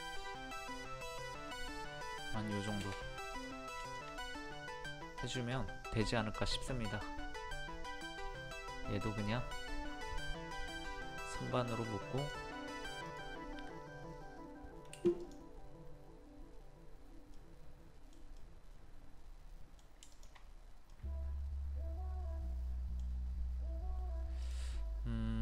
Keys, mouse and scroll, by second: 1.5 middle click, 2.6 scroll down 2, 3.3 click, 3.8 shift+click, 4.4 middle click, 6.4 click, 10.6 middle click, 11.3 scroll down 1, 11.5 middle click, 12.2 click, 13.1 right click, 15.2 click, 17.4 middle click, 18.4-20.0 middle drag, 20.0 middle click, 20.1 shift+click, 20.9-23.9 middle drag.